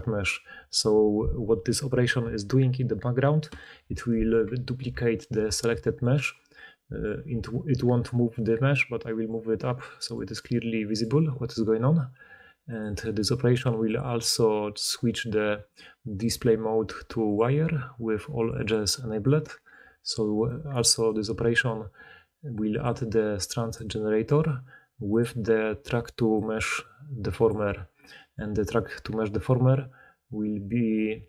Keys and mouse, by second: 5.3 shift+d, 5.5 click, 6.5-13.7 middle drag, 7.2 g, 13.7-18.4 drag, 18.4 middle click, 18.5 click, 18.6-20.9 middle drag, 19.7 g, 20.9 click, 21.0-22.7 middle drag, 22.7-31.2 drag.